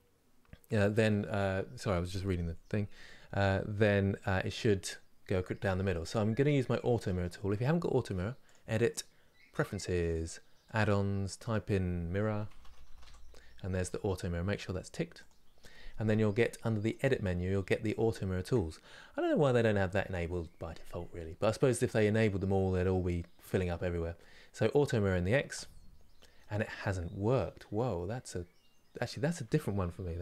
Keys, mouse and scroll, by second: 9.5-12.1 drag, 25.2 click, 26.0-30.0 middle drag, 30.0 ctrl+z.